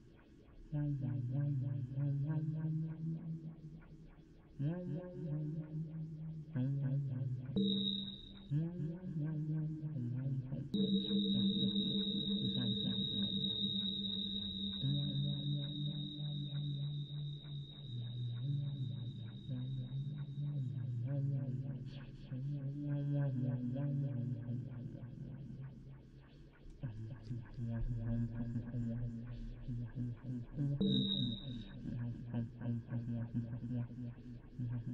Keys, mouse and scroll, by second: 0.0-6.0 typing, 0.0 click, 1.3-3.6 drag, 10.7-13.6 middle drag, 13.7-16.7 drag, 19.2-21.5 drag, 20.7 n, 23.4 BackSpace, 24.0 l, 25.1 l, 27.0-28.8 drag, 31.1 click, 32.3-33.4 middle drag.